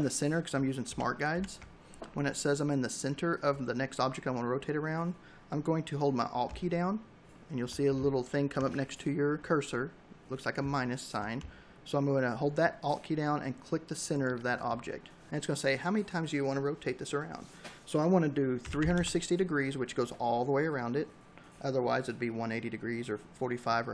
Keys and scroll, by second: 17.2-18.2 typing.